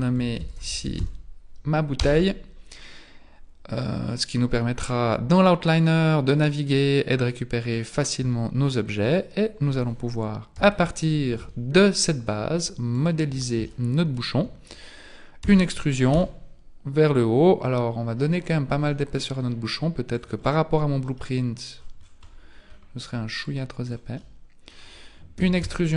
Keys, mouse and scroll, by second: 0.7 t, 6.2 click, 9.0 right click, 10.5 KP_1, 11.4 Tab, 12.0 scroll up 3, 12.9 alt+right click, 13.7 shift+middle click, 15.4 e, 20.4-21.8 scroll down 11, 21.8-22.4 scroll up 13, 22.7-23.4 scroll down 1, 23.4 click, 23.4 scroll down 1, 24.2 middle click, 25.4 e.